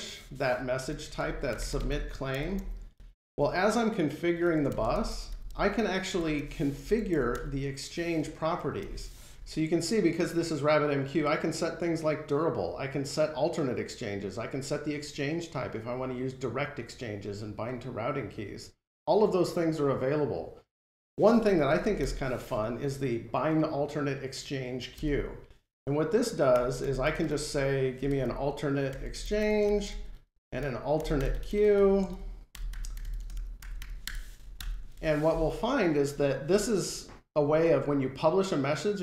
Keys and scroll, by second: 2.2 Return, 2.9 Return, 4.4 Return, 24.8 Return, 28.6 Return, 34.5 alt+super+Return.